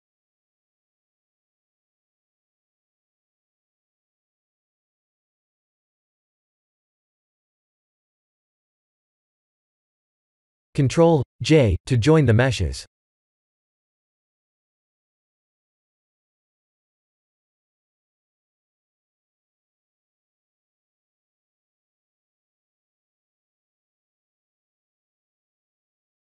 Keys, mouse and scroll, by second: 0.7 click, 2.8 click, 3.2 click, 3.6 middle click, 3.9 middle click, 4.1 middle click, 4.4 middle click, 4.9 middle click, 5.0 middle click, 5.1 middle click, 5.3 middle click, 9.5 click, 10.1 shift+click, 11.4 ctrl+j, 11.9 click, 13.5 click, 14.2 click, 20.6 click, 25.2 middle click.